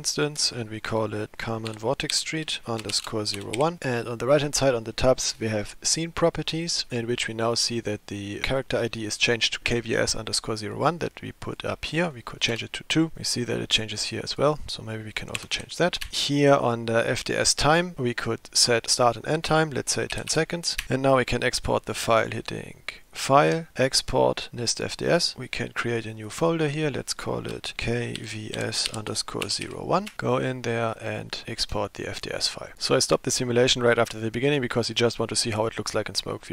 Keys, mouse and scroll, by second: 6.0 click, 11.5-13.4 drag, 14.3-16.1 drag, 18.0 click, 18.8-20.9 drag, 23.1-24.4 drag.